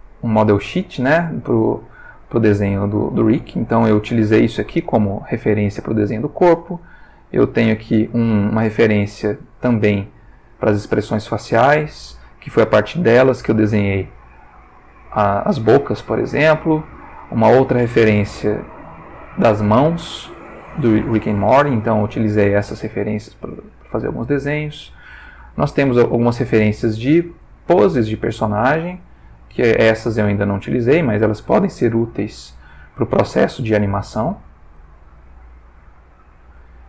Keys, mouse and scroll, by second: 1.0-2.0 shift+middle drag, 2.1-3.6 shift+middle drag, 6.2 click, 7.0 click, 8.2 ctrl+middle click, 9.0 ctrl+shift+middle click, 10.1 ctrl+shift+middle click, 11.2 shift+middle click, 14.7 click, 16.7 click, 17.5 ctrl+middle click, 18.3-19.8 ctrl+shift+middle drag, 20.6 ctrl+middle click, 23.7 click, 24.6 click, 25.8-26.4 shift+middle drag, 26.5 ctrl+shift+middle click, 27.6 ctrl+shift+middle click, 28.8 click, 29.4 g, 30.2 click, 30.6 ctrl+middle click, 31.8-33.2 ctrl+shift+middle drag, 34.2-35.0 shift+middle drag, 36.0 click.